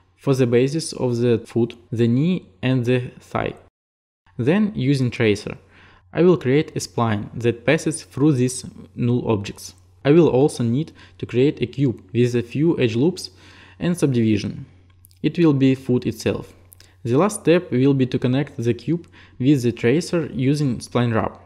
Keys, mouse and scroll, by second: 0.4-1.5 alt+drag, 1.7-4.0 alt+drag, 5.7-6.8 drag, 12.6-15.4 drag, 17.9 click, 21.3 alt+click.